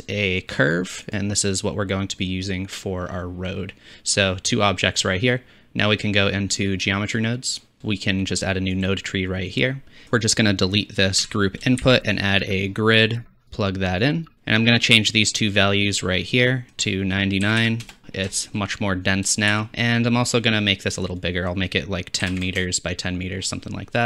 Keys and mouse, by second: 8.8-10.1 drag, 11.2 x, 11.8 shift+a, 16.5-20.2 drag, 17.6 KP_9, 18.0 shift+z, 19.5 shift+z.